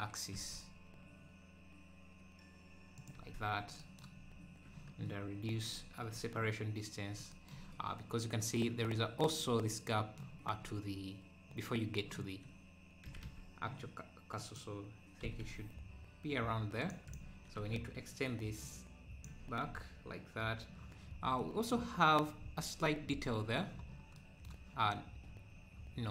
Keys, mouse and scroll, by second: 3.1 Tab, 4.2 scroll down 1, 5.5 scroll down 1, 7.8-8.1 scroll down 4, 8.2 scroll up 2, 13.1 g, 15.2 g, 17.1 click, 17.6 Tab, 18.6 click, 19.3 Tab, 21.0-21.4 scroll up 3, 21.4-23.9 middle drag, 23.9 scroll up 1.